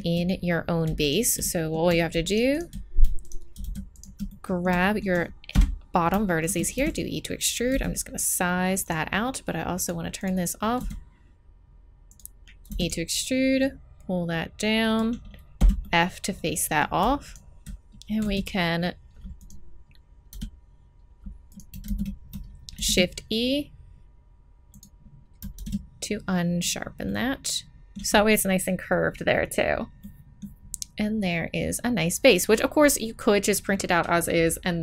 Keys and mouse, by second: 3.0 middle click, 5.5 KP_1, 6.7 e, 7.7 s, 9.7-12.1 drag, 10.8 s, 12.7 e, 15.6 f, 18.2 s, 20.3 e, 21.8 ctrl+z, 22.7 shift+e, 25.5 shift+e, 27.0-28.7 middle drag, 30.0-34.8 middle drag.